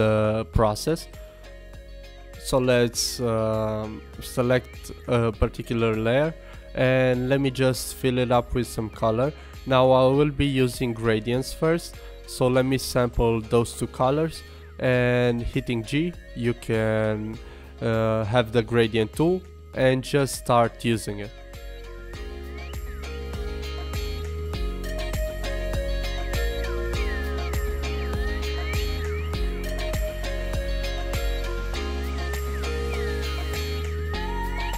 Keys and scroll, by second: 25.0 super+z, 26.4 super+z, 28.8 super+z, 31.0 super+z.